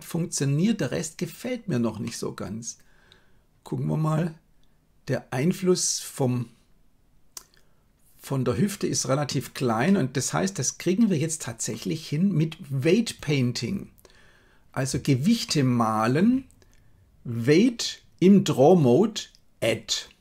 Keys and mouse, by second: 0.8 right click, 2.0-9.3 middle drag, 9.8-11.6 middle drag, 15.5 shift+middle click, 19.2 click.